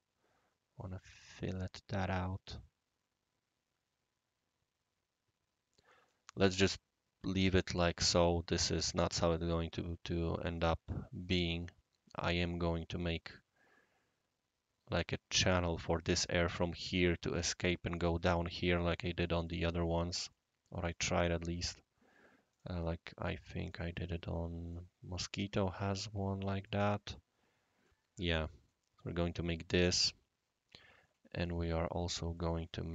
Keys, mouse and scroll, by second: 7.9 click, 9.0-11.6 right drag, 19.4 click, 20.3 right click, 22.5 click, 23.6 click, 24.7 click, 25.5 click, 26.6 click, 27.8 right click, 28.7-29.0 middle drag, 32.3 click.